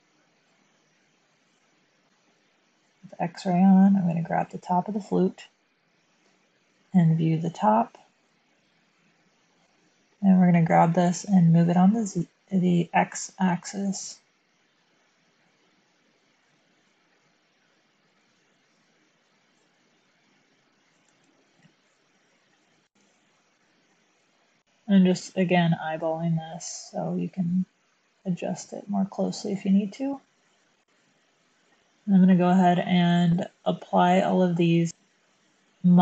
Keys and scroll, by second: 6.2 7, 10.1 g, 12.0 x, 21.0 Tab, 22.9 1, 24.8 Tab, 24.8 7, 24.8 g, 24.8 x, 24.8 1.